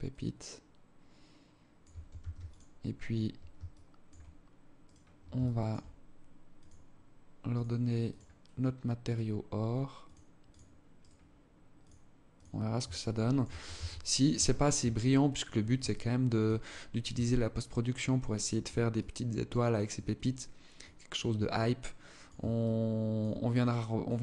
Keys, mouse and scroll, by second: 1.6 ctrl+s, 3.2 alt+shift+click, 4.3 right click, 4.8 alt+shift+click, 6.0 click, 8.5 right click, 9.5 click, 10.5 right click, 11.3 click, 12.4 alt+shift+click, 13.2 ctrl+s, 14.5 alt+click, 15.4 alt+shift+click, 16.2 scroll up 1, 16.8 alt+click, 18.5 alt+click, 20.3 alt+click, 21.0 alt+click, 22.0 alt+shift+click, 23.0 alt+click, 23.9 alt+shift+click.